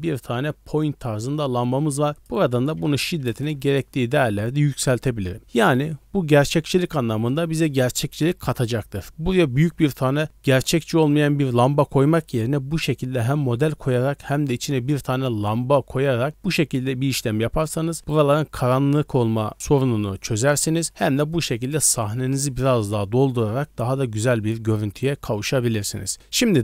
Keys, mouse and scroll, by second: 2.1-3.5 drag, 26.1 shift+middle drag, 26.1 scroll down 2, 26.5-26.6 middle drag.